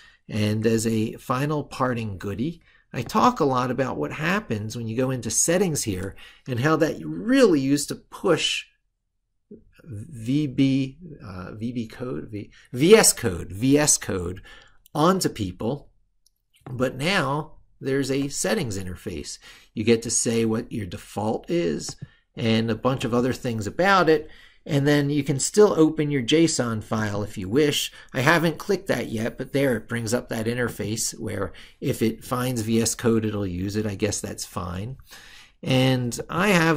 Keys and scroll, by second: 0.4 ctrl+super+Right.